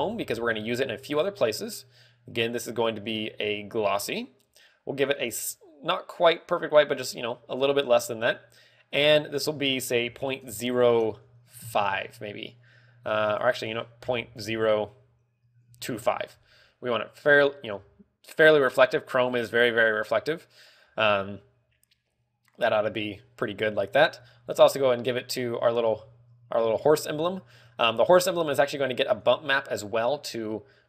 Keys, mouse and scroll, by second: 3.6 click, 5.5 click, 9.8 ctrl+click, 13.9 ctrl+click, 17.4 scroll up 5, 17.9 shift+middle click, 18.3 scroll up 2, 23.9 scroll down 7, 24.7 scroll up 3, 25.8 right click, 26.7 z, 27.7 z, 28.5 click.